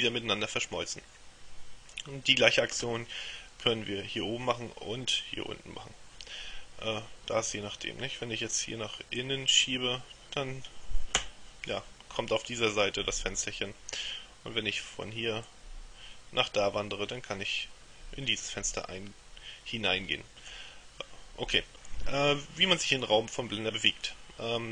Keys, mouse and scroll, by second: 9.2-11.6 drag, 15.6-21.1 drag.